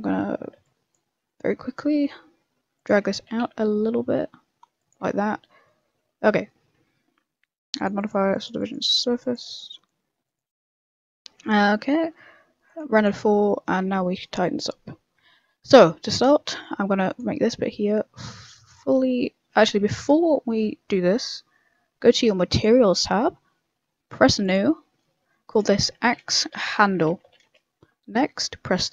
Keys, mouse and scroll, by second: 1.4 middle click, 2.7 click, 3.2 g, 5.0 a, 5.1 scroll down 4, 5.6 middle click, 6.1 Tab, 6.2 scroll down 1, 6.4 middle click, 7.7 click, 7.9 click, 8.6 click, 8.8 click, 9.4 click, 10.7 middle click, 11.2 middle click, 11.4 shift+middle click, 11.6 shift+middle click, 12.6 click, 13.9 Tab, 14.1-15.2 scroll up 3, 15.2 a, 15.4 a, 16.4 ctrl+r, 19.7 ctrl+z, 20.1 Tab, 21.0 scroll down 2, 22.0 click, 24.4 click.